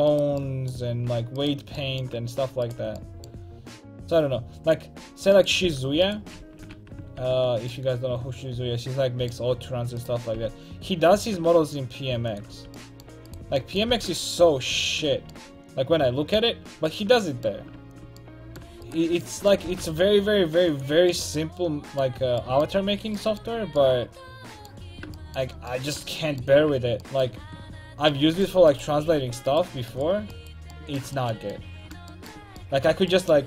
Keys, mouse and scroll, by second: 0.1 right click, 1.1 a, 3.9-5.7 drag, 3.9 right click, 4.4 right click, 5.4 right click, 5.7 g, 6.4 ctrl+x, 6.8 a, 7.2 ctrl+t, 7.5 a, 10.0 click, 10.4-12.3 drag, 10.4 g, 12.4 click, 12.6 a, 13.3-15.2 drag, 13.9 g, 15.2 a, 16.9-18.6 right drag, 19.7 g, 21.0 a, 22.8 a, 23.5 a, 26.7 Tab, 27.5 Tab, 28.7-30.1 right drag, 30.8 right click, 31.0 middle click.